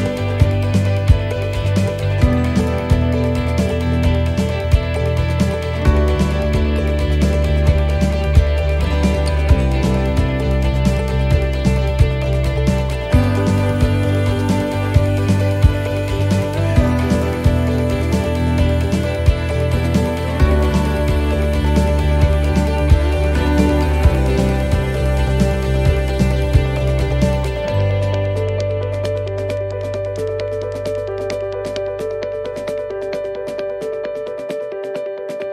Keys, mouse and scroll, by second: 0.8 click, 2.0 click, 4.9 click, 5.1 alt+shift+right click, 5.9 right click, 6.4 middle click, 6.8-7.5 scroll up 1, 7.5 scroll up 1, 8.1 alt+shift+right click, 9.4 alt+shift+right click, 11.9 alt+shift+right click, 12.7 alt+shift+right click, 12.7 shift+middle click, 12.7 shift+scroll up 1, 14.1 alt+shift+right click, 15.1 alt+shift+right click, 16.1 ctrl+z, 16.8 alt+shift+right click, 17.5 shift+middle click, 17.8 shift+scroll down 1, 18.5 alt+shift+right click, 20.8 alt+shift+right click, 23.2 alt+shift+right click, 23.2 shift+middle click, 23.6 shift+scroll down 2, 24.1 middle click, 24.5 shift+middle click, 24.9 scroll down 1, 25.4 shift+middle click, 26.3 e, 27.2 alt+s, 31.5 middle click, 32.3-32.8 scroll down 1, 32.8 a, 33.3 middle click, 33.8 right click, 34.7 l, 35.1 middle click.